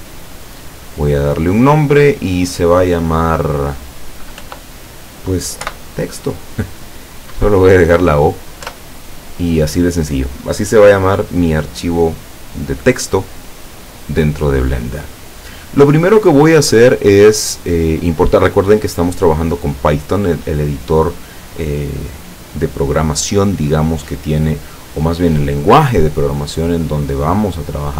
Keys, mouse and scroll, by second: 1.2 click, 4.4 End, 5.7 o, 8.7 Return.